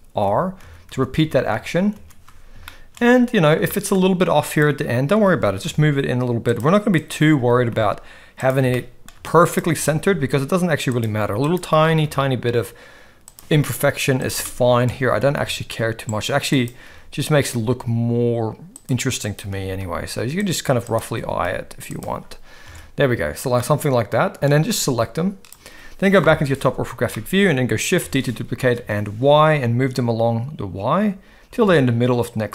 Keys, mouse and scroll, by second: 0.2-2.0 typing, 2.6-3.0 shift+middle drag, 3.8 shift+middle click, 4.4 click, 5.1 g, 7.0 click, 7.4 g, 8.7-9.1 shift+middle drag, 9.7 g, 11.4 click, 11.7 g, 14.1 click, 14.4 shift+middle drag, 15.1 g, 16.6 click, 16.8 g, 19.3 click, 19.5 g, 20.9 click, 21.1 g, 22.7 alt+a, 23.6-24.4 middle drag, 24.7-25.5 drag, 26.2 KP_7, 27.1-27.5 shift+middle drag, 28.0 shift+d.